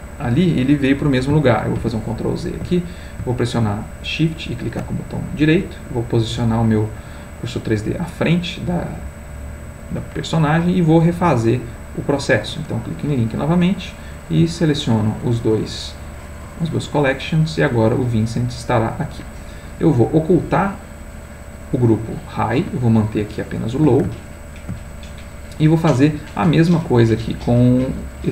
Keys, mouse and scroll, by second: 1.8 ctrl+z, 4.2 shift+right click, 5.1-7.9 shift+middle drag, 8.4-9.9 middle drag, 11.3 click, 12.2 click, 14.2 shift+click, 15.6 click, 18.1-19.5 middle drag, 21.0 click, 23.2 shift+middle click, 24.2 ctrl+shift+middle click, 25.2 ctrl+click, 26.7 click.